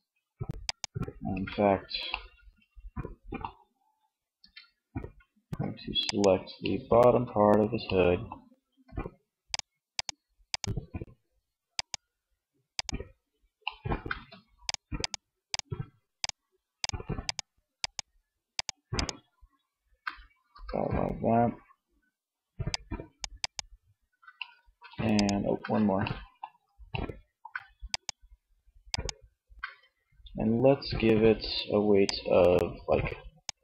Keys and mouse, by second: 0.4 ctrl+Tab, 3.5 Tab, 14.0-19.5 middle drag, 19.4 c, 22.5 middle click, 23.7-24.8 middle drag, 25.3 middle click, 28.9 middle click.